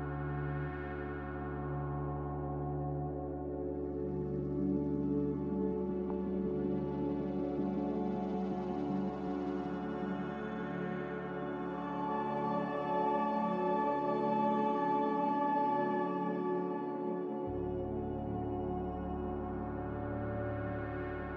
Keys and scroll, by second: 16.8 Delete.